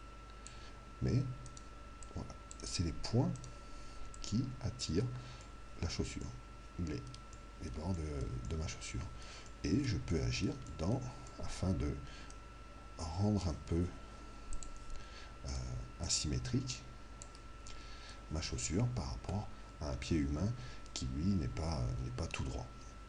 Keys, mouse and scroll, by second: 1.5 right click, 6.0-12.9 middle drag, 12.3 right click, 15.4 right click, 16.0 click, 17.8-21.3 middle drag.